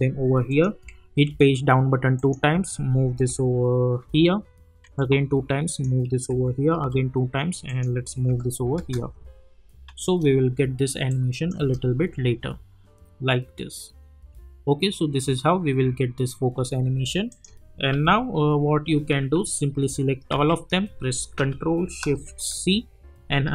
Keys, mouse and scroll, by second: 0.5 click, 1.3 Page_Down, 2.1 click, 3.1 p, 4.0 [, 4.8 Page_Down, 5.7 click, 6.3 [, 6.7 Page_Down, 7.7 click, 8.3 [, 8.7 space, 11.1 click, 11.6 space, 16.5 space, 17.3 click, 17.9 u, 20.3 ctrl+a, 22.5 ctrl+shift+c, 23.4-23.5 typing.